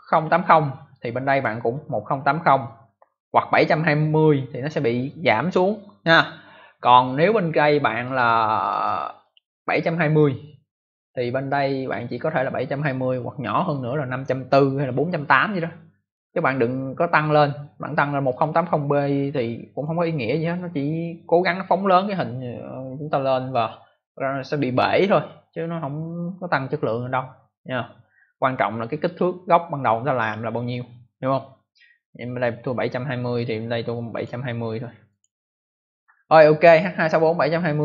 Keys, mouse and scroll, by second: 1.2 click, 1.3 click, 8.0 click, 8.1 click, 9.1 click, 11.4 click, 18.2 click, 18.3 click, 19.7 click, 19.7 click, 29.0 click, 29.1 click, 30.1 click, 30.2 click, 33.3 click, 33.4 click, 34.1 click, 34.1 click, 35.0 click.